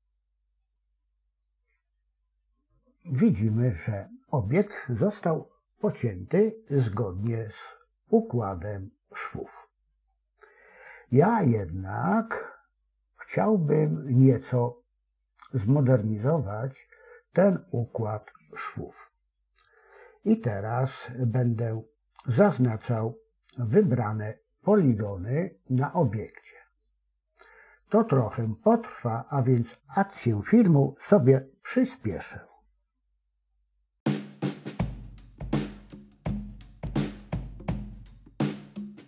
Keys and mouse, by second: 8.3-10.0 middle drag, 18.6-21.0 middle drag, 21.6 middle click, 23.7 click, 35.3 alt+shift+click, 35.8 alt+shift+click, 36.9 middle click, 37.8 middle click, 38.3 alt+shift+click, 38.5 middle click.